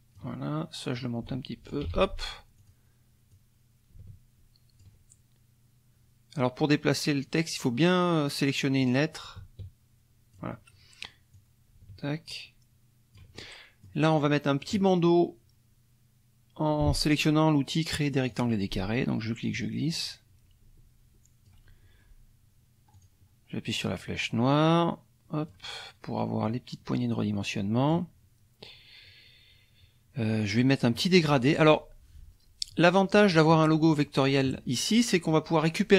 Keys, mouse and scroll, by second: 0.9 click, 1.3-1.9 ctrl+scroll, 1.9 ctrl+z, 2.6 click, 3.3-5.0 drag, 8.8-10.5 drag, 11.3-13.3 drag, 13.4 ctrl+middle click, 18.3 click, 19.5-21.7 drag, 22.9 click, 24.6 click, 26.4-28.1 drag, 33.1 click, 33.8 click.